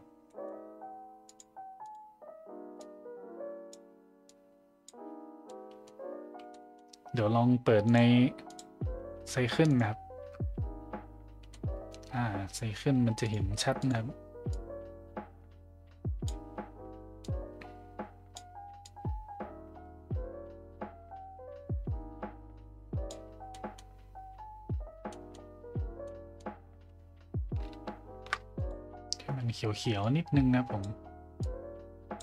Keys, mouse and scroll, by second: 0.3 middle click, 1.3 click, 1.9 click, 5.4-5.8 middle drag, 6.5 middle drag, 7.8 click, 8.5-9.9 drag, 11.5 middle click, 13.2 click, 13.8 click, 17.2-18.4 drag, 18.8-23.1 drag, 23.5 middle drag, 25.1 middle click, 26.1 middle click, 28.6 click.